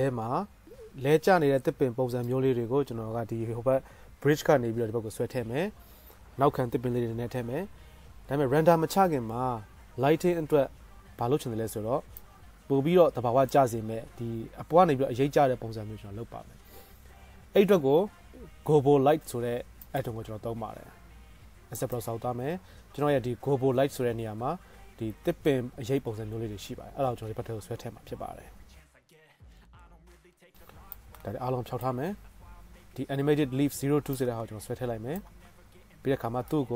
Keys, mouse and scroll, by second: 12.4 middle click, 12.9-13.5 drag, 12.9 right click, 13.1 middle click, 13.1 right click, 13.5-18.8 middle drag, 26.7-29.3 middle drag, 29.3 right click, 29.5 middle click, 29.7 right drag, 29.7-30.2 middle drag, 30.2 scroll up 1, 30.4 middle click, 30.6 right drag, 30.9 middle click, 31.4 scroll up 1, 34.4-35.8 scroll up 1, 35.8 middle click, 35.9-36.7 drag.